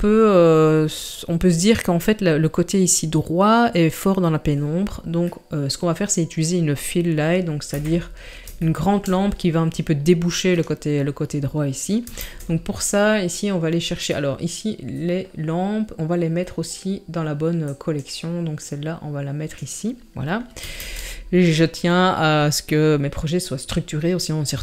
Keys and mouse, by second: 5.3-5.8 middle drag, 7.7 KP_7, 8.7 shift+middle drag, 12.2 shift+a, 17.7 click, 18.6 click, 20.8 shift+a.